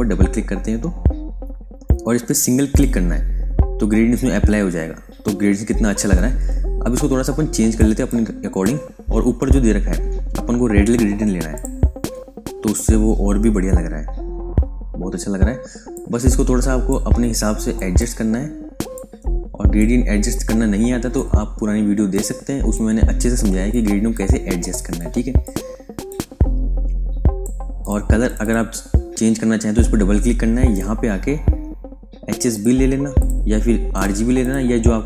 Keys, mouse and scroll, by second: 2.7 click, 7.1 click, 11.5 click, 15.8 click.